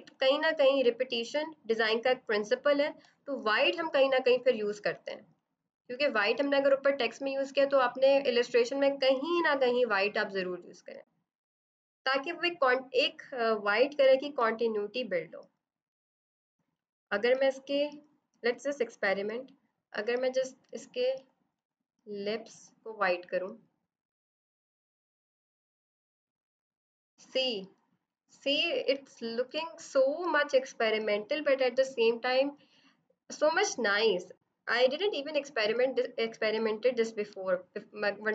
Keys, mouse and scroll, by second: 0.0 click, 4.8 click, 17.2 click, 18.0 z, 18.6 click, 19.8 v, 20.9 click, 22.4 click, 26.1 ctrl+0, 26.2 click, 29.2 ctrl+Caps_Lock, 29.4 ctrl+=, 35.2 ctrl+Caps_Lock, 37.2 -.